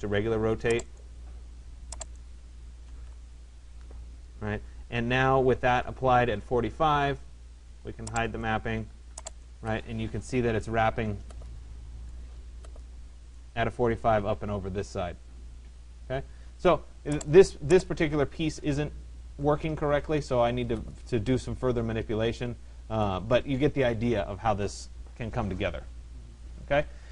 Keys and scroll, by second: 2.5-3.3 typing.